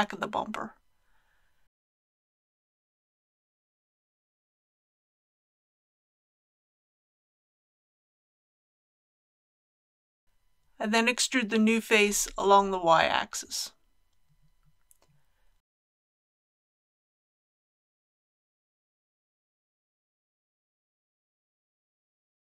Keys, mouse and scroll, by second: 0.0 k, 1.9-4.8 drag, 4.9 Return, 7.6 3, 8.9 click, 9.9 KP_7, 11.5 typing, 15.8 shift+click, 17.1-17.7 scroll down 1, 20.4-21.8 middle drag, 22.3 KP_1.